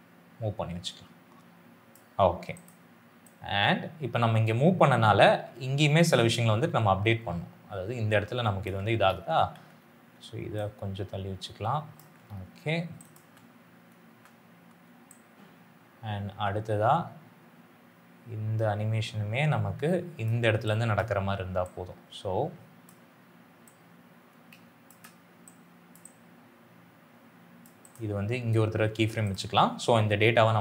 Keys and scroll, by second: 13.1 space.